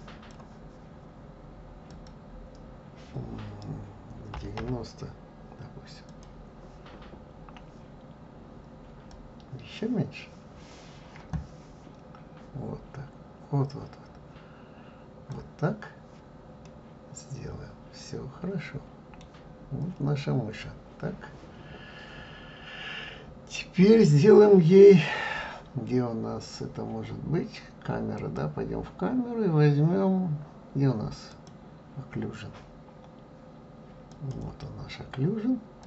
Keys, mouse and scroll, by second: 2.2-5.2 drag, 9.4-12.4 drag, 16.9-20.0 middle drag, 20.2 scroll up 2, 21.1-23.0 scroll up 2, 28.5 click, 31.6 click, 34.4 click.